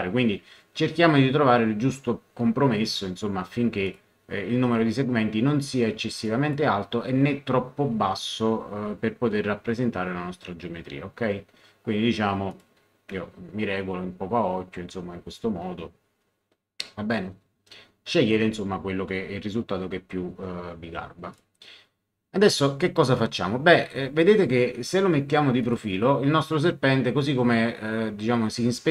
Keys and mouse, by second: 3.8 click, 6.2 click, 12.5 click, 21.3 click, 25.6 click.